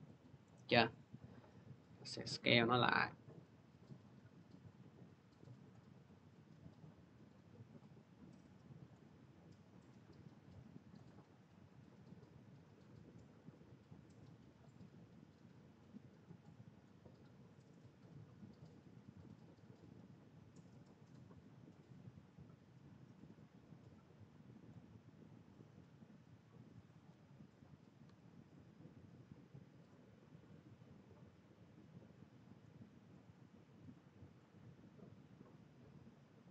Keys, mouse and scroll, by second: 0.3 middle click, 4.2 click, 4.2-5.4 middle drag, 5.5 click, 8.7 click, 13.1-15.8 drag, 16.6-21.6 drag, 24.4-29.5 drag, 27.9 c, 30.4 c.